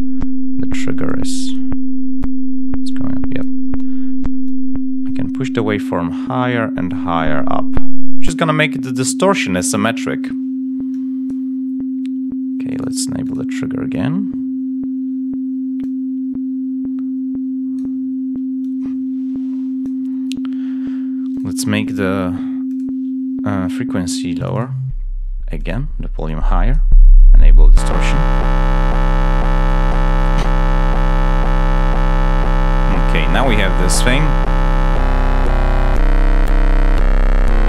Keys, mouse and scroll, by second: 0.9 click, 1.3 click, 2.8 click, 4.3 click, 7.0-8.4 drag, 11.2 click, 12.6 click, 13.1 click, 15.7 click, 22.6 click, 24.0 click, 24.3 click, 25.5 click, 26.2 click, 27.5 click, 28.2-29.8 drag, 30.1 click, 33.2 click, 34.2 click.